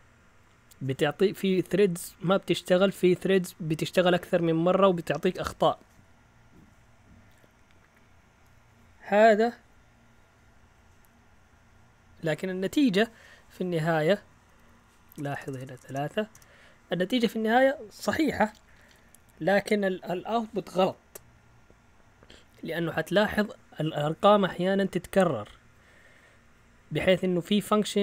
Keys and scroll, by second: 12.9 Up, 13.4 Up, 14.4 Down, 15.1-15.8 typing, 16.3 Return.